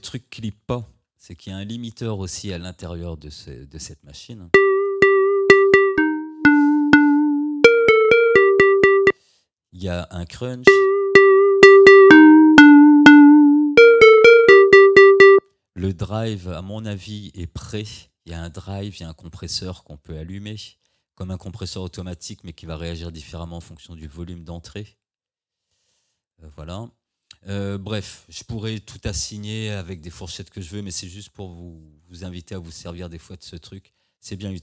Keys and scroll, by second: 1.0 Tab, 4.5 space, 9.1 space, 10.7 space, 15.4 space.